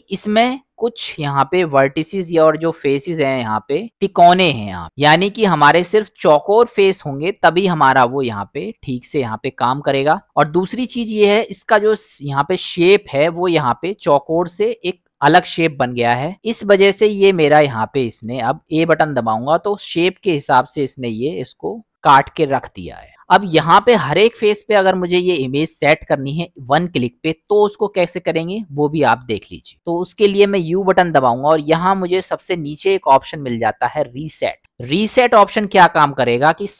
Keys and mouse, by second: 1.1 middle click, 2.4 middle click, 4.9-6.0 middle drag, 8.2-8.8 middle drag, 9.7 middle click, 10.3 middle click, 11.7 middle click, 13.0-14.9 middle drag, 19.2 a, 25.5 middle click, 30.6 u.